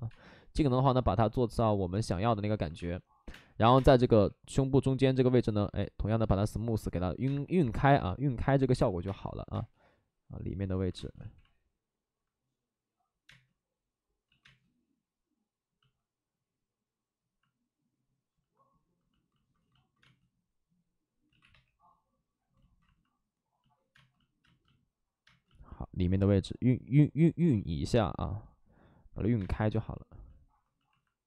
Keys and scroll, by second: 3.2 space, 3.2 2, 3.9 2, 7.2 space, 8.9 2, 8.9 space, 11.1 ctrl+z, 13.2 space, 14.2 ctrl+z, 14.4 space, 19.9 space, 21.2 ctrl+z, 21.4 3, 23.9 space, 24.3 space, 29.6 space.